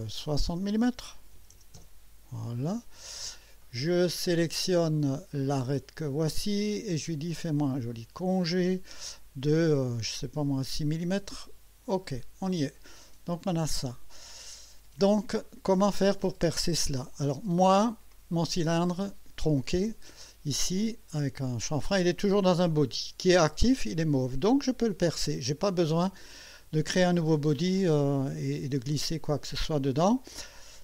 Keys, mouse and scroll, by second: 1.3 KP_6, 1.5 KP_0, 1.7 KP_Enter, 3.6-4.4 right drag, 6.0 click, 7.7 click, 9.5 scroll up 1, 10.2 scroll up 1, 11.9 click, 12.8-15.3 drag, 15.4 right click, 18.1 click, 25.2 click.